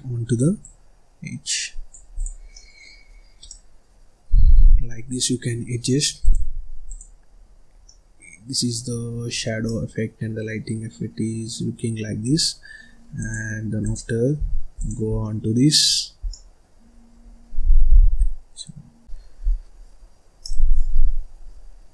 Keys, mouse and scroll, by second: 0.5 click, 2.0 click, 2.4 scroll down 1, 2.4 middle click, 2.9-3.4 scroll up 1, 3.4-4.4 middle drag, 4.4 scroll up 1, 4.6-5.0 scroll down 1, 5.0-6.1 scroll up 1, 6.1 click, 6.8 click, 7.3-7.6 scroll up 1, 7.6 scroll down 2, 7.8-8.8 middle drag, 8.8-9.5 scroll up 6, 9.5-12.6 middle drag, 13.0 click, 13.7 click, 14.3-14.7 scroll down 1, 14.7 click, 15.0 scroll down 2, 15.1 middle click, 15.7-16.1 scroll up 1, 16.1 scroll down 1, 16.2 middle click, 16.8-17.1 scroll up 1, 17.1 scroll down 1, 17.4-18.8 scroll up 1, 18.8 scroll up 1, 19.4-19.9 scroll down 1, 19.9-20.4 scroll up 2, 20.4 middle click, 21.0-21.9 scroll down 1.